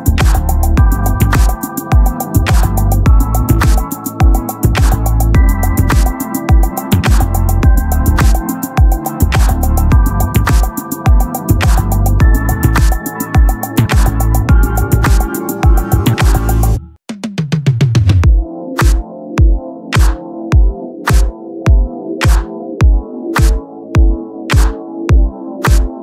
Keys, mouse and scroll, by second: 2.0 right click, 4.7-14.2 drag, 14.2-15.4 right drag, 21.1-22.1 right drag, 22.1-24.7 drag.